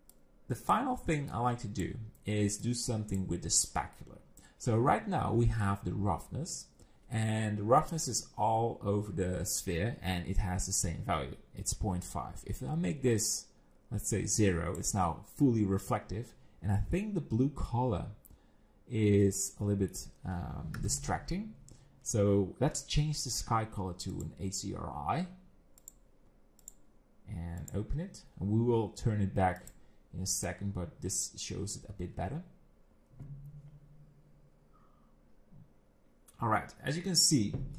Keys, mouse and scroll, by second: 0.1 click, 1.3 click, 2.6 click, 12.6 click, 16.9 middle click, 19.2 middle click, 20.8 KP_0, 24.1 click, 25.8 click, 27.6 click.